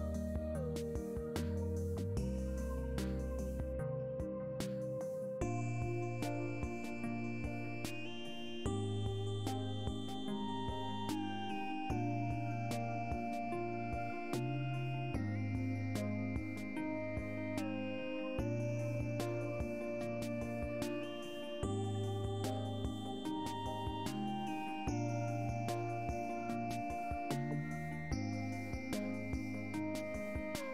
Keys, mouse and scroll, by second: 1.5 click, 4.0 click, 4.6-5.6 middle drag, 8.1-9.2 middle drag, 12.9 alt+click, 14.0 alt+shift+click, 14.6 alt+shift+click, 15.0 alt+shift+click, 15.3 alt+shift+click, 15.8 alt+shift+click, 17.5 click, 18.6-19.6 drag, 20.6 click, 23.8 click, 24.4-25.5 middle drag, 27.3 alt+click, 28.6 alt+shift+click, 29.1 click, 29.9 click, 30.4 click.